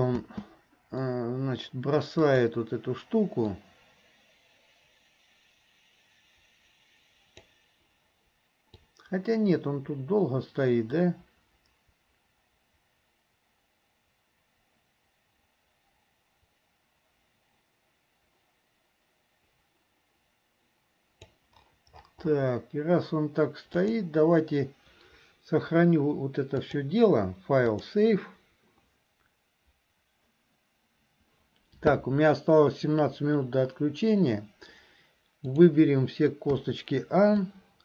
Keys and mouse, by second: 2.4 click, 3.7-7.7 drag, 9.1-21.6 drag, 24.0 click, 26.6-30.5 drag, 35.6 click, 37.6-37.8 drag.